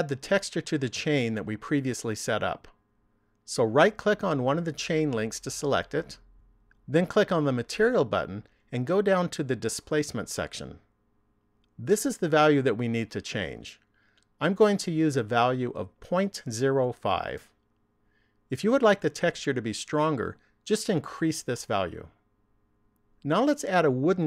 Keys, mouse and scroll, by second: 5.1 right click, 7.6 click, 9.8 click, 12.3 click.